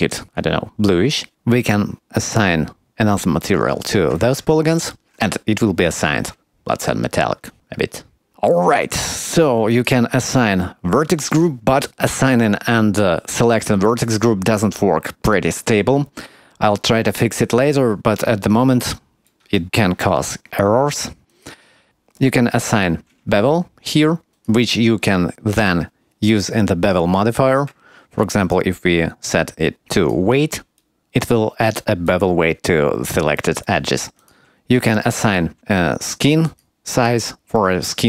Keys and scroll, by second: 4.5 Tab, 22.5 Tab.